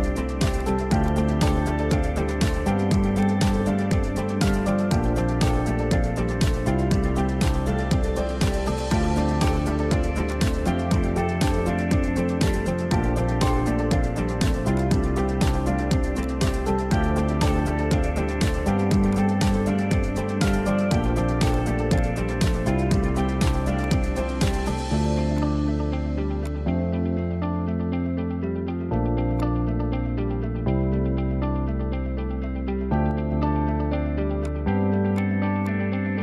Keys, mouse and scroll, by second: 0.0 r, 1.0 click, 1.5 g, 2.8 r, 3.7 middle click, 4.2 scroll down 1, 4.5-6.9 middle drag, 6.9 alt+h, 7.3 middle click, 9.2 click, 9.4-9.9 scroll down 10, 10.6 ctrl+click, 11.2-11.9 scroll up 6, 11.9 r, 13.8-14.8 middle drag, 14.8 click, 15.0-15.5 scroll up 2, 15.5 g, 18.5 r, 20.4 alt+d, 21.5 click, 22.5 alt+d, 24.4 r, 26.1 g, 26.9 alt+r, 29.4-29.9 middle drag, 29.9-30.2 scroll up 1, 30.9-32.0 middle drag, 32.0 scroll down 1, 32.2-32.9 scroll up 5, 32.9 scroll down 1, 33.6-34.4 middle drag, 34.4 click, 35.2 click, 35.7 drag.